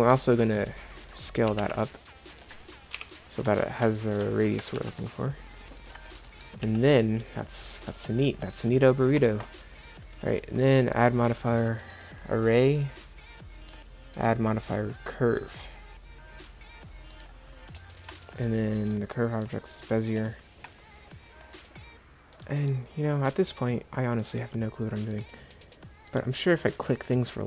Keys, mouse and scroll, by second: 0.7 middle click, 1.5 g, 3.0 KP_7, 4.8 s, 6.7 z, 10.1 right click.